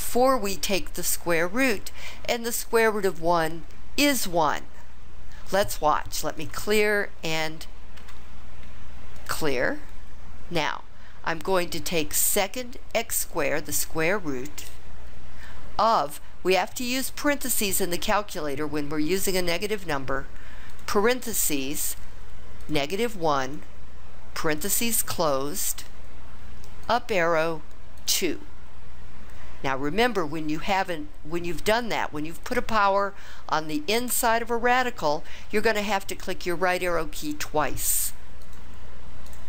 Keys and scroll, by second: 20.7 (, 23.5 1, 24.5 ), 26.8 ^, 28.0 2, 38.5 Right, 39.3 Right.